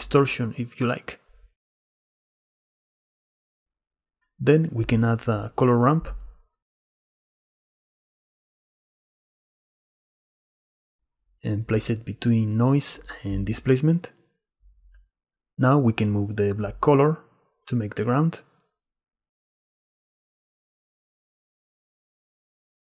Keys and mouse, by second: 0.0-1.3 shift+middle drag, 3.1-4.1 drag, 6.9 middle click, 8.4 shift+a, 15.2 middle click, 16.8 click, 18.2-21.2 drag, 21.2-22.5 middle drag, 22.5 click, 22.7 click.